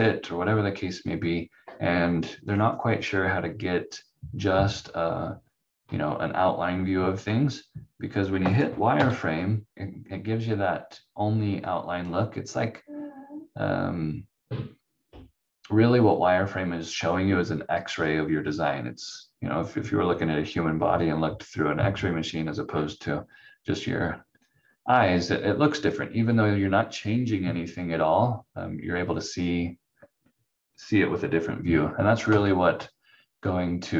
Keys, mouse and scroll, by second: 8.5 click, 8.9 v, 11.2 scroll up 1, 11.9-12.2 scroll down 1, 32.3 v.